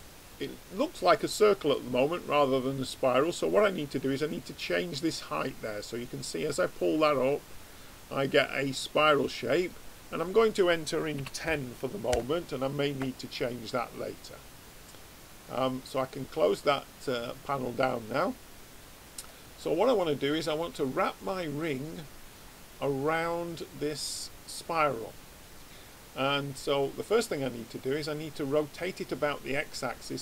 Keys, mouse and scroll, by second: 4.3 click, 10.3 click, 15.4 click, 16.5-19.0 middle drag, 16.9 right click, 19.5-23.8 middle drag, 21.2 click, 21.6 right click, 29.6-30.2 middle drag.